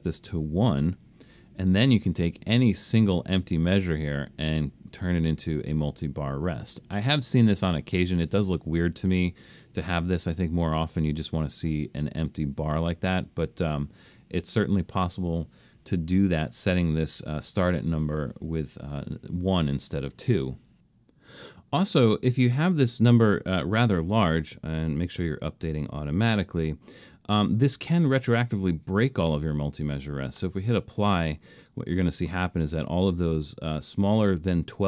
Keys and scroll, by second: 14.2 super+z, 15.8 alt+super+a, 18.7 2, 23.6-24.5 typing.